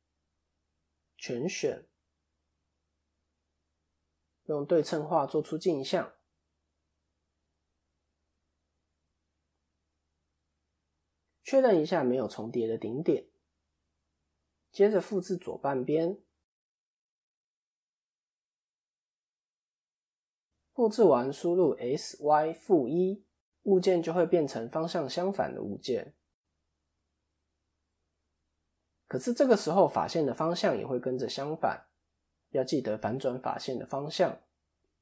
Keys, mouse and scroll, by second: 0.3 shift+middle click, 0.7-1.1 shift+scroll down 2, 1.0 a, 4.1 click, 7.4 click, 13.8 shift+middle click, 14.4 click, 18.5 shift+d, 20.6 s, 25.6 scroll up 1, 26.2-27.9 scroll down 1, 27.9 click, 30.3-30.9 scroll up 1, 30.9-31.9 scroll down 1, 32.1-32.8 scroll down 1, 32.8 shift+n, 33.7-34.4 scroll up 2, 34.9-35.0 scroll up 3, 34.9 shift+middle click.